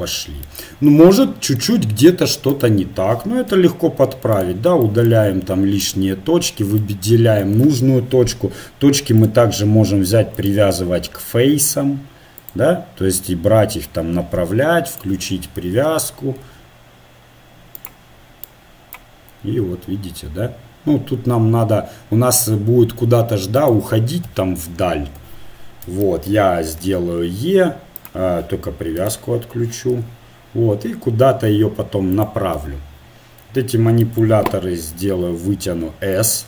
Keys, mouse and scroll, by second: 1.2 middle click, 2.5-4.3 right drag, 3.5 x, 5.0 click, 5.8-8.2 drag, 9.2-11.2 drag, 12.4-14.4 drag, 14.9-16.8 drag, 16.4 g, 18.5-19.6 drag, 19.6-21.0 right drag, 24.3 KP_1, 25.1 KP_3, 26.9 e, 29.0 click, 30.0 g, 32.6 KP_7, 35.0 s.